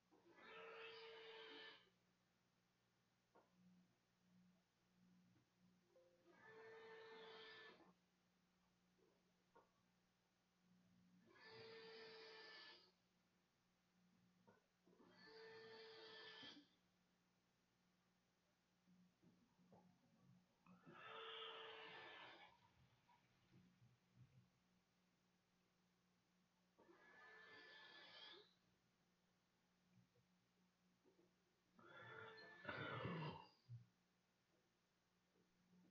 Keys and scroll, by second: 1.0 a.